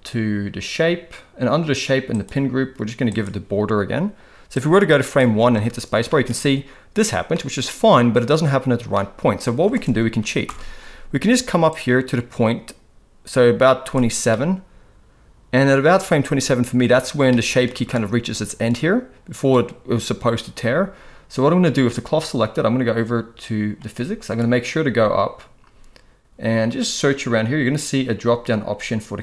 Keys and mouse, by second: 2.1-3.2 drag, 4.5-5.1 drag, 5.5 space, 6.1 middle click, 7.3-7.7 middle drag, 9.0-9.5 middle drag, 9.6 space, 10.4 shift+Left, 11.7-14.0 drag, 14.3-16.0 middle drag, 17.3-17.6 middle drag, 18.7-19.9 middle drag.